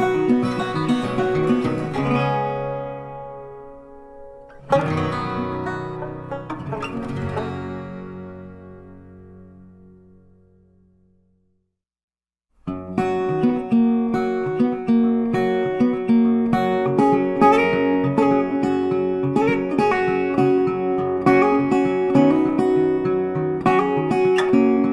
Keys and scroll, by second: 18.2 ctrl+t, 19.1 ctrl+t.